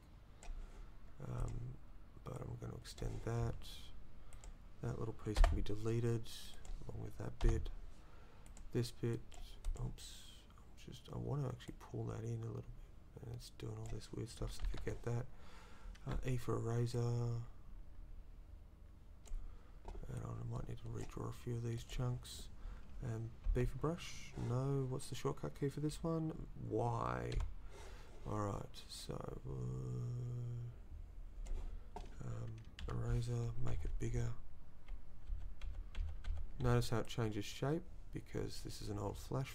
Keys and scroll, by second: 14.7 ctrl+z, 16.1 e, 23.5 b, 27.4 y, 32.8 e.